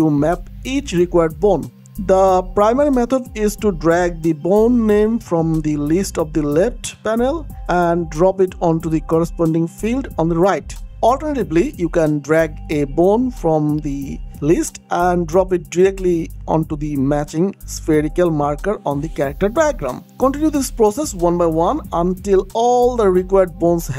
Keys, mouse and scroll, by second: 1.7-2.7 scroll up 1, 2.7 scroll down 1, 3.0-3.7 scroll up 1, 3.7-4.5 scroll down 1, 5.3-6.5 scroll up 1, 6.7-7.6 scroll up 1, 7.6-9.1 scroll down 1, 9.1 click, 13.5 click, 17.4 click, 21.5 click, 22.4 click, 23.4 click.